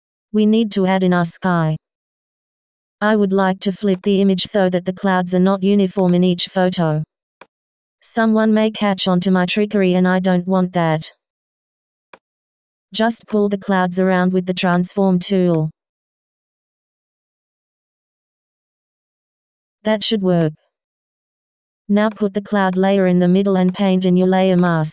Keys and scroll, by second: 20.8 Return, 24.1 w.